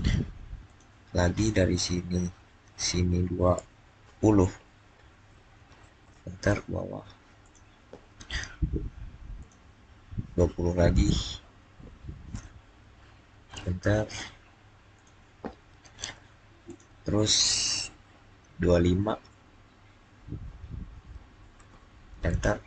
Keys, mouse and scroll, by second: 0.5 click, 4.8-5.4 typing, 5.9 Return, 7.3 click, 9.3 click, 11.9 click, 12.5-13.2 typing, 13.4 Return, 14.8 click, 21.0 click, 21.2-22.0 typing.